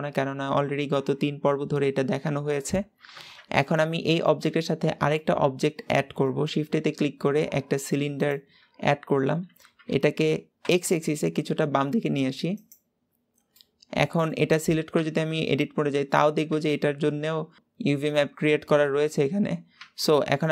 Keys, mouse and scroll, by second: 3.0 Tab, 3.6-8.1 middle drag, 8.1 shift+a, 8.4-9.2 scroll down 1, 9.2 scroll up 2, 9.8 g, 12.8-13.4 scroll up 3, 13.4-14.8 middle drag, 14.8 Tab, 16.3 a, 19.6 Tab, 20.3 click.